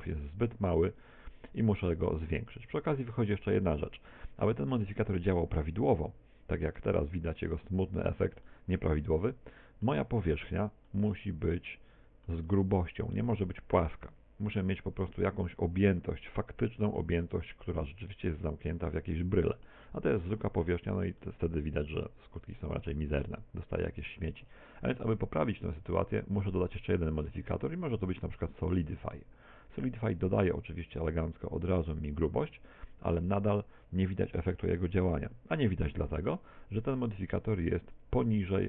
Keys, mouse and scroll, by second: 4.8 middle click, 7.7-8.5 scroll up 4, 8.5 shift+middle click, 9.0 middle click, 10.1 Tab, 10.9 middle click, 17.0 middle click, 18.2-18.5 scroll down 2, 18.7 scroll down 1, 19.1 shift+middle click, 20.8 Tab, 21.2 middle click, 23.1 Tab, 26.8 click, 32.5 Tab, 37.3 click.